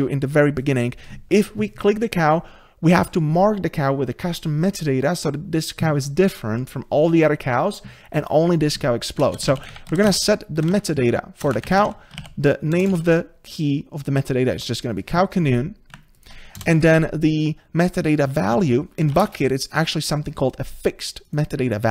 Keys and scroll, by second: 11.5 Return, 14.6 Tab.